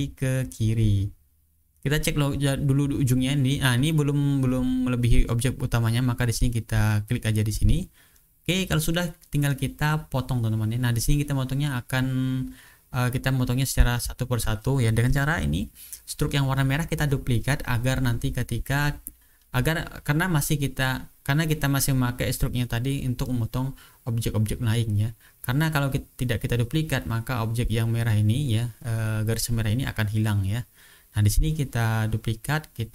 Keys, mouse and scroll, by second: 0.8-1.7 ctrl+scroll down 2, 2.3-3.3 ctrl+scroll up 2, 3.4 click, 4.0-6.9 drag, 7.0-7.4 ctrl+scroll down 2, 8.6 click, 9.1-9.6 ctrl+scroll down 4, 11.2-11.7 ctrl+scroll up 2, 13.5-14.2 ctrl+scroll up 2, 14.7 click, 15.9 click, 16.6 ctrl+scroll down 2, 17.9 shift+click, 19.5 click, 22.6 click, 23.2 click, 24.0 click, 25.5 click, 26.0 click, 26.6 ctrl+scroll down 2, 27.3-28.3 ctrl+scroll down 2, 28.3 ctrl+scroll up 2, 29.4 click, 30.3 click, 31.4 click, 32.3 shift+click.